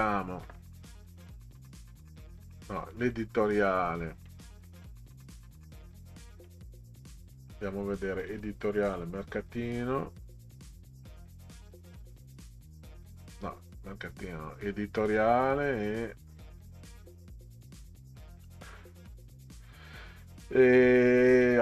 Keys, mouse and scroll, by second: 1.3 click, 1.6 click, 2.8 click, 3.0 click, 8.2 click, 8.9 click, 10.7 scroll down 2, 11.5 click, 15.3-16.0 scroll up 4, 16.5-16.9 scroll up 6, 17.9-18.9 scroll up 6, 19.6-20.1 scroll down 4.